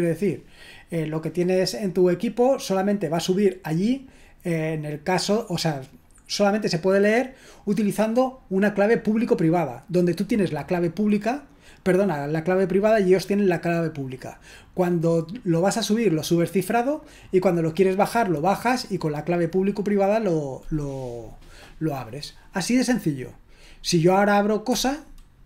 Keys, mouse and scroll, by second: 24.7 Return.